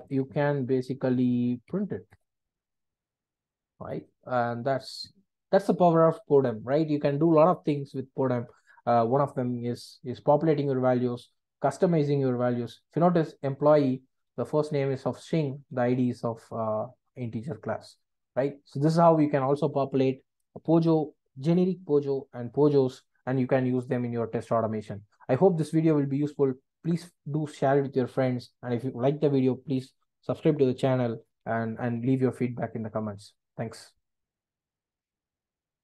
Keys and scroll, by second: 0.7 Return.